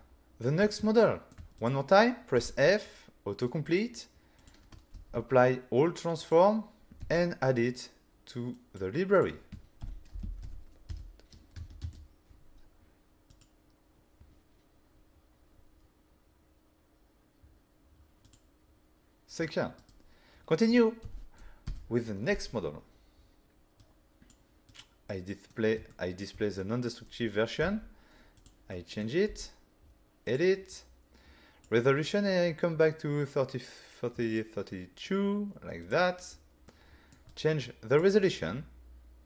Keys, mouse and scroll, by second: 0.4 ctrl+middle click, 0.6 middle click, 1.0 shift+middle click, 1.6 click, 2.4 typing, 3.5 click, 4.4 click, 4.9 ctrl+a, 6.2 click, 7.0 n, 8.5 click, 9.1 click, 9.8-12.0 typing, 13.3 click, 18.3 click, 19.8 right click, 21.0 n, 21.7 Delete, 23.8 click, 24.7 click, 25.1 middle click, 25.9 shift+middle click, 26.6 middle click, 27.6 <, 28.4 click, 28.7 middle click, 29.3 f, 30.3 click, 30.7 click, 35.9 click, 36.7 click, 36.7 middle click, 37.3 click.